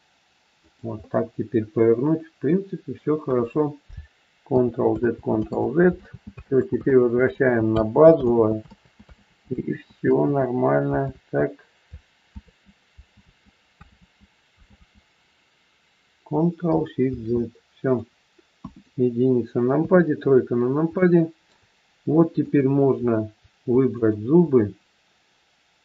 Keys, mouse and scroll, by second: 0.9 middle click, 4.5 ctrl+z, 4.9 ctrl+z, 5.9 ctrl+z, 6.3 ctrl+z, 6.9 ctrl+z, 7.2 ctrl+z, 7.8 ctrl+z, 8.2 ctrl+z, 8.6 ctrl+z, 9.1 ctrl+z, 9.6 ctrl+z, 10.2 ctrl+z, 11.0 ctrl+z, 12.3 ctrl+z, 13.1 ctrl+z, 13.8 ctrl+z, 14.7 ctrl+z, 17.0 ctrl+shift+z, 18.5 KP_1, 19.7 KP_3, 20.5 scroll up 1, 20.9 shift+middle click, 22.3 click, 23.9 shift+click.